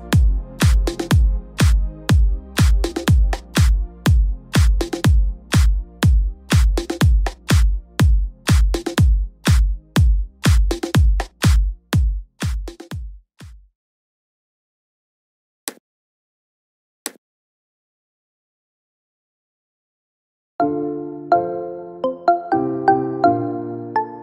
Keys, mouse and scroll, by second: 3.1 p, 22.7 u.